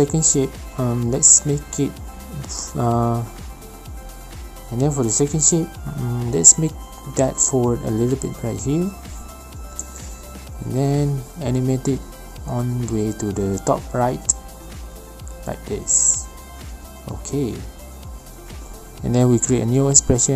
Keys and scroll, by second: 3.3 alt+shift+p, 16.9 ctrl+shift+z.